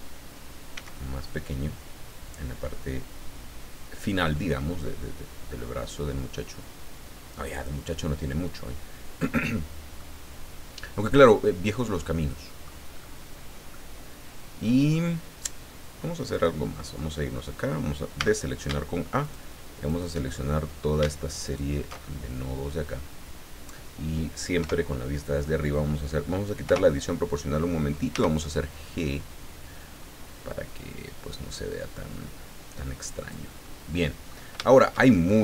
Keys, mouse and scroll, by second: 0.7 s, 2.0-2.6 scroll down 3, 4.5 scroll down 2, 7.5 click, 10.0-11.4 middle drag, 11.6 scroll down 2, 12.0 middle click, 12.9 scroll up 2, 13.7-15.1 middle drag, 16.3 click, 16.9-17.4 scroll up 1, 18.2 a, 19.2 alt+shift+right click, 19.8 alt+shift+right click, 20.3-20.9 alt+shift+scroll up 1, 21.4 alt+shift+right click, 22.1-23.2 alt+shift+scroll down 7, 24.6 KP_7, 26.6 o, 28.1 g, 33.1 click, 33.6 click, 34.6-35.4 shift+drag.